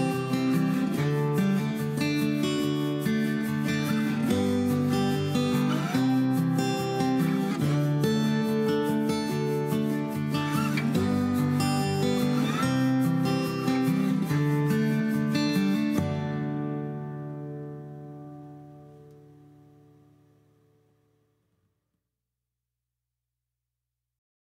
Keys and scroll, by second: 5.1 typing, 5.3 Return, 6.9-7.3 Caps_Lock, 19.5 Escape, 20.8 ctrl+h, 22.5 l.